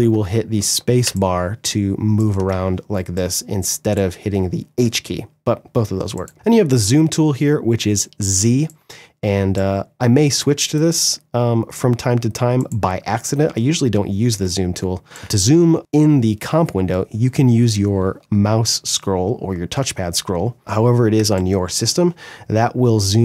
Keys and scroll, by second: 0.1 ctrl+z, 0.5 space, 10.4 space, 13.8 space, 20.7 space.